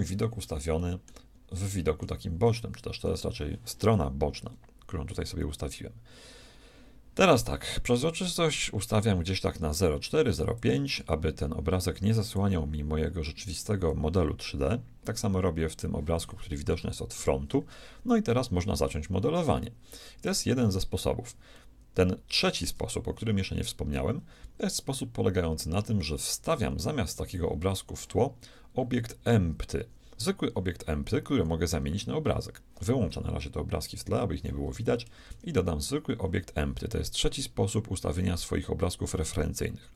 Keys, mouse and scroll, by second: 1.6-5.1 shift+middle drag, 7.7-9.6 drag, 12.3-15.8 drag, 16.7 KP_1, 33.9-35.7 drag, 35.5 shift+a.